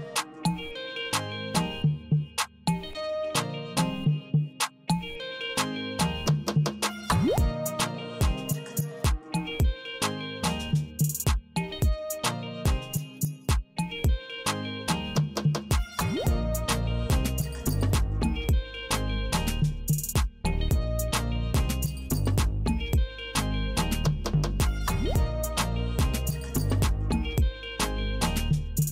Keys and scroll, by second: 0.5 h, 2.5 Right, 4.5 s, 5.5 s, 6.2 s, 7.8 Right, 9.8 m, 11.1 m, 12.5 Right, 14.5 w, 16.0 w, 17.2 w, 18.2 w, 19.3 w, 20.4 w, 21.5 w, 22.5 w, 23.6 w, 24.7 w, 25.7 w, 26.7 w, 27.6 w, 28.8 w.